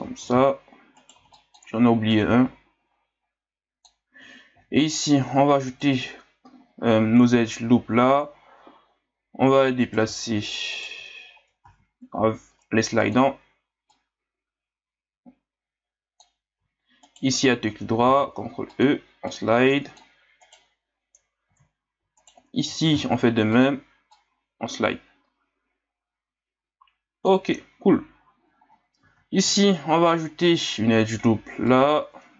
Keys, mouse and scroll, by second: 0.2 ctrl+z, 0.9 right click, 1.1 b, 2.1-4.5 drag, 4.5 ctrl+r, 6.6-9.7 scroll up 1, 9.8 alt+right click, 10.7 alt+right click, 11.6 ctrl+e, 17.0 alt+right click, 18.0 ctrl+e, 20.4 right click, 21.5 ctrl+z, 22.2 alt+right click, 22.9 ctrl+e, 28.2 ctrl+scroll up 1, 29.0 ctrl+r.